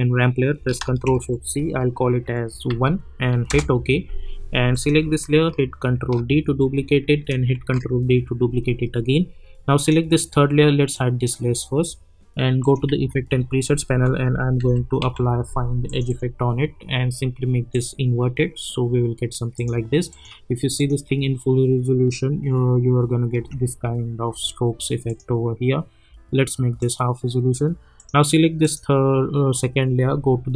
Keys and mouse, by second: 0.5 ctrl+a, 1.0 ctrl+shift+c, 2.7 1, 3.4 Return, 4.7 click, 6.0 ctrl+d, 7.6 ctrl+d, 9.7 click, 12.8 ctrl+a, 13.9-15.5 typing, 15.9 click, 23.3 space, 25.0 click.